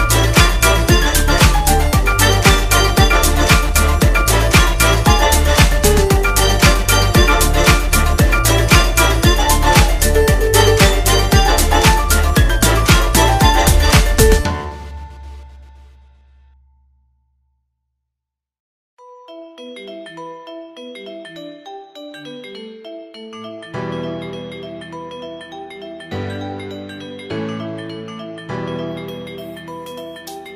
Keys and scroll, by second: 16.2 space, 17.8 space, 18.7 space, 20.1 space, 20.7 space, 22.2 space, 22.8 space, 23.3 space, 24.7-27.1 typing, 28.3 space, 29.2 space.